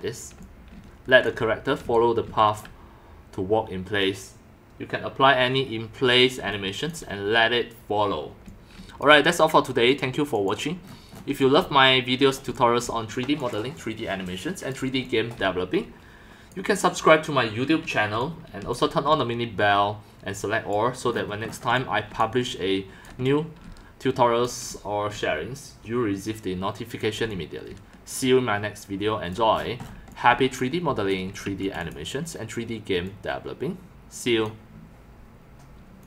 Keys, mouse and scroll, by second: 0.4-2.3 typing, 0.4-1.2 drag, 1.9 click, 2.5 right click, 6.4 x, 6.5 click, 8.5 click, 8.5-8.8 typing, 9.3 drag, 9.9 click, 10.3 click, 11.1-15.4 typing, 11.4-12.1 drag, 12.9-13.4 drag, 13.5 click, 13.8 click, 18.1-32.0 typing, 18.2-18.7 drag, 21.7-22.2 drag, 22.4 click, 22.5-23.0 right drag, 23.2 right click, 24.1-24.4 drag, 24.7 drag, 28.1-29.3 drag, 30.1-31.2 drag, 33.0-34.4 drag, 34.9-35.9 typing, 35.4 click, 36.0 click.